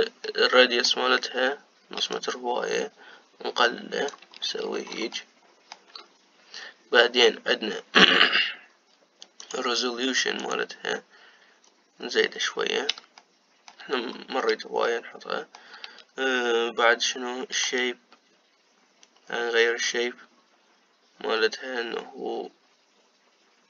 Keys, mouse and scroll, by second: 1.0-2.8 middle drag, 2.8-5.1 shift+drag, 5.1-5.9 scroll up 5, 5.9-8.9 shift+middle drag, 10.1-12.5 drag, 12.5-13.9 scroll down 2, 13.9 shift+middle click, 14.8-15.6 scroll up 2, 15.6-18.5 shift+middle drag, 18.5-21.6 shift+drag.